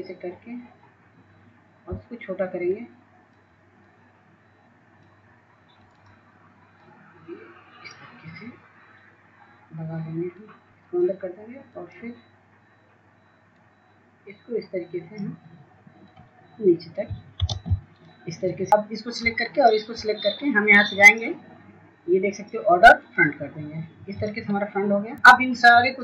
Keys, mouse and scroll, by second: 0.5 scroll down 1, 2.8 shift+click, 5.4 scroll up 1, 5.9-17.4 drag, 18.4-26.0 drag.